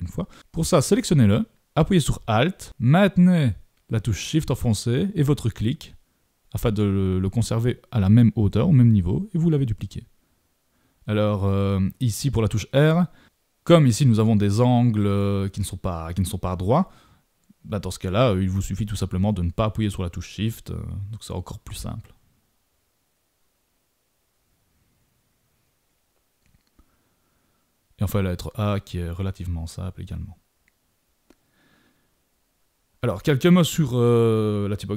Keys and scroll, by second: 22.9 super+=, 29.8 super+-.